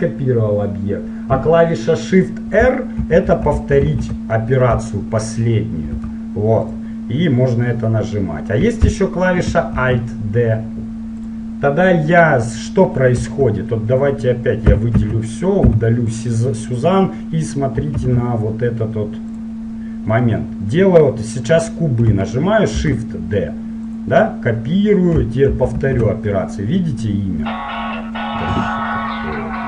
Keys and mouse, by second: 3.2 shift+r, 3.5 shift+r, 4.3-6.8 middle drag, 6.8 click, 7.5-8.5 right drag, 8.5 middle click, 10.0 alt+d, 14.1-15.8 middle drag, 14.9 a, 15.1 a, 15.8 x, 18.1 shift+a, 20.0-21.9 middle drag, 22.9 shift+d, 25.6 shift+r.